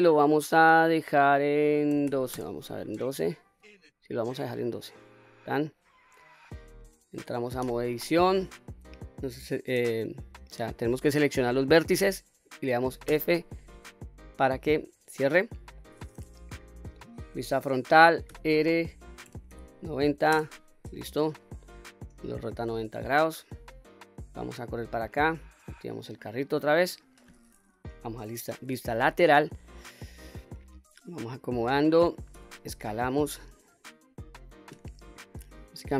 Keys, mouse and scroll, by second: 0.2 click, 0.2 shift+a, 1.0-3.7 drag, 4.5 click, 5.3-5.6 middle drag, 6.5 click, 7.6 Tab, 13.1 f, 14.5-15.8 middle drag, 16.8 KP_1, 18.3 r, 19.3 KP_9, 19.5 KP_0, 20.3 Return, 21.6 middle click, 22.6-23.2 scroll down 1, 23.9-24.9 drag, 23.9 scroll down 1, 26.0 click, 26.6-27.7 middle drag, 27.8 KP_3, 28.3-29.7 scroll up 3, 29.7 click, 31.2 click, 32.3 s, 34.2 click, 35.6 click.